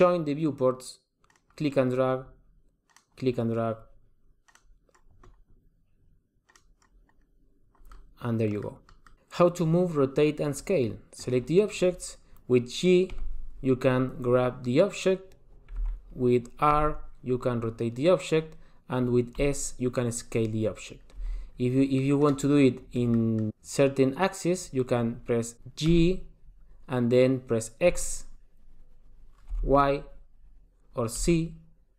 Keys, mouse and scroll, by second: 7.0 click, 8.1 middle click, 8.8 middle click, 11.2 click, 13.2 g, 16.7 r, 21.4-23.1 scroll down 3, 21.9 middle click, 23.1 middle click, 26.1 g.